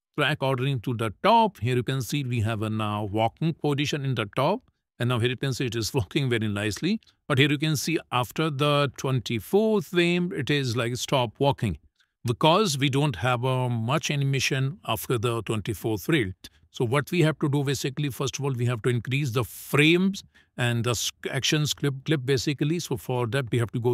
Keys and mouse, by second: 3.2 space, 4.1 space, 4.9 shift+middle click, 5.6 click, 6.1 space, 6.8 space, 21.9 click.